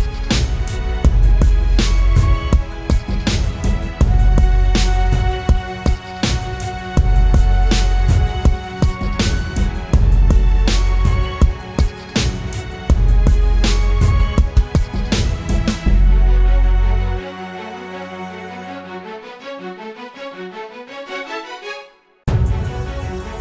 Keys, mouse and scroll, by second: 22.7 double click.